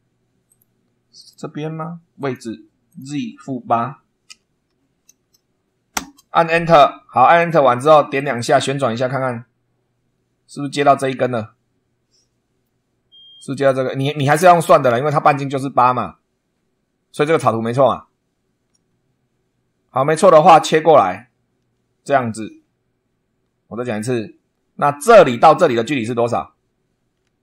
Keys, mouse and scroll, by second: 0.4 click, 1.1 click, 2.1 click, 2.8 click, 4.2 -, 4.6 8, 5.9 Return, 7.3 click, 8.1 click, 9.1 middle click, 9.5 right click, 10.1 middle click, 10.3 click, 10.7-12.8 right drag, 13.7 scroll up 1, 13.9 scroll down 1, 20.4 click, 22.4-24.1 middle drag.